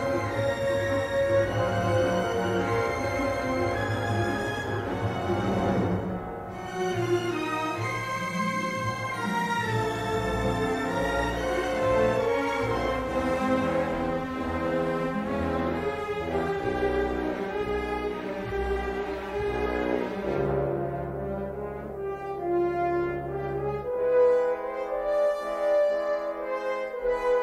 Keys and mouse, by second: 2.8 click, 5.7 middle click, 9.7 s, 13.7 g, 15.3-17.0 middle drag, 18.6 click, 19.0 g, 20.8 middle click, 22.5 middle click, 23.3 3.